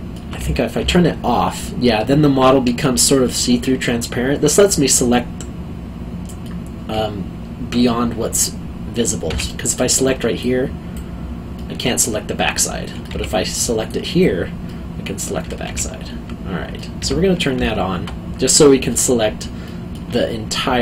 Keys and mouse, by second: 0.4 q, 1.2 middle click, 9.3 q, 9.7 middle click, 10.4 click, 11.5 middle click, 13.1 q, 13.8 click, 14.6 middle click, 15.6 o, 16.7 middle click, 17.0 o, 17.4 middle click, 18.6 alt+middle click, 19.6 alt+middle click.